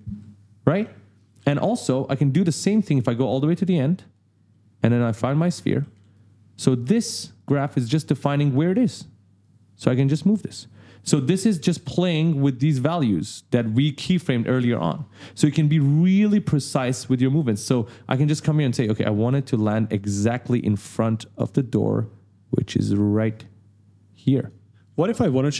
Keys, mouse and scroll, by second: 0.0 ctrl+z, 0.8 s, 1.2 d, 3.6 click, 4.1 right click, 4.3-6.4 typing, 4.7 right click, 7.3 right click, 7.8 right click, 8.8 click, 9.4 click, 14.9 click, 19.9 right click, 21.4 click, 24.8 d, 24.8 right click.